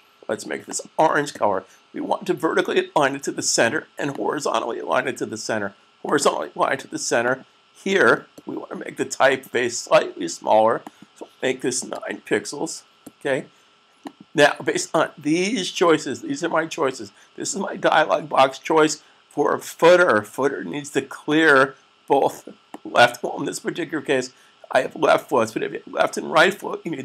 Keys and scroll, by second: 11.8 9.